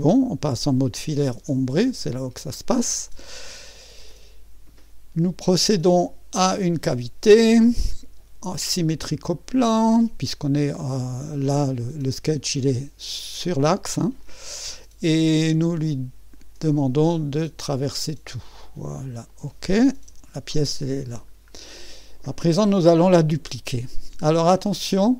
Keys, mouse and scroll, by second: 2.4 2, 3.5-4.1 scroll up 1, 4.1 right click, 6.4 click, 8.8 click, 11.8 click, 14.2-15.7 drag, 16.4 click, 17.8 click, 19.3 click, 19.9-21.3 typing, 20.8-21.8 scroll up 1, 21.8 middle click, 22.6-23.4 typing, 22.9 middle drag.